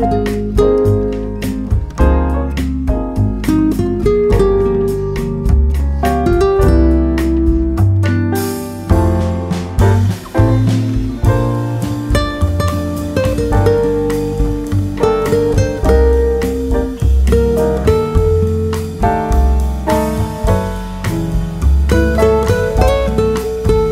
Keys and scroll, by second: 0.6 ctrl+c, 3.5 ctrl+v, 11.1 ctrl+e, 16.8 ctrl+c, 20.5 ctrl+v, 22.2 t.